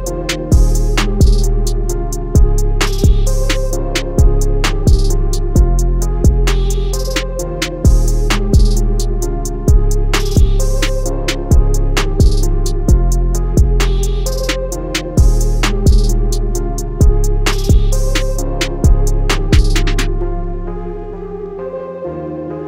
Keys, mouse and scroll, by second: 9.9 click.